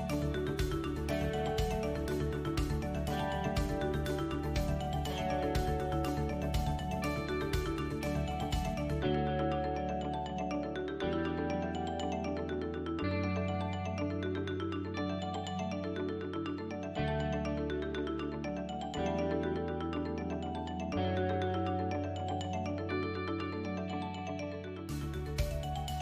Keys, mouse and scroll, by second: 1.9 click, 7.6 middle click, 8.8 click, 9.1 middle click, 11.3 shift+click, 12.1 KP_7, 12.9 shift+middle click, 14.3 alt+e, 17.1 ctrl+KP_1, 19.0 click, 19.9 shift+click, 20.5 KP_7, 21.9 e.